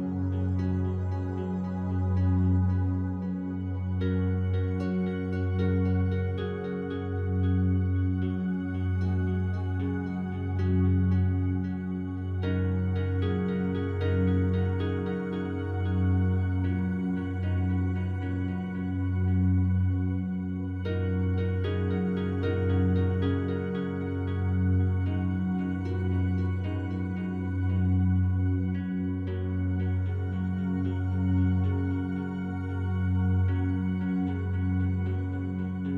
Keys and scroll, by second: 3.6 space, 7.9 space, 10.7 space, 13.0 space, 18.2 space, 21.8 space, 25.8 space, 28.3 space, 31.7 space, 32.5 space, 35.2 ctrl+z.